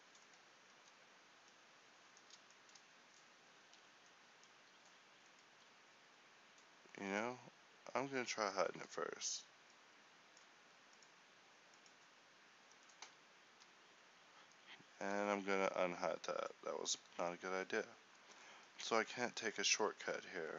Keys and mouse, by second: 1.4 Tab, 2.5-4.2 middle drag, 4.2 alt+h, 7.6-14.1 drag, 13.4 Tab, 14.1 a, 15.6 Tab, 17.6 Tab, 18.1 a.